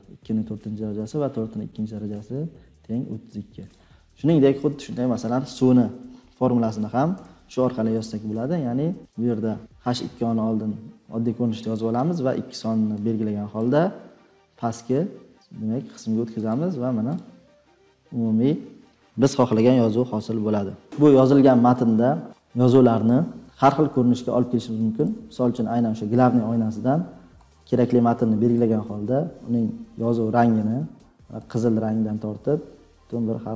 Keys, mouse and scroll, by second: 5.4-6.5 drag, 20.8-22.2 scroll down 10, 22.3-24.4 drag, 25.0-27.9 drag, 28.5-31.3 drag, 31.5-33.1 drag, 33.1-33.5 middle drag.